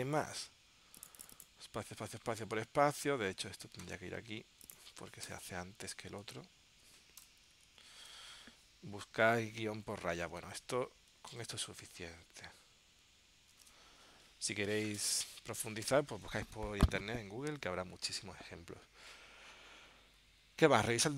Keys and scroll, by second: 3.7 super+x, 6.4 super+v, 7.9 super+s, 10.4 super+Tab, 11.5 super+Tab, 13.7 super+Tab.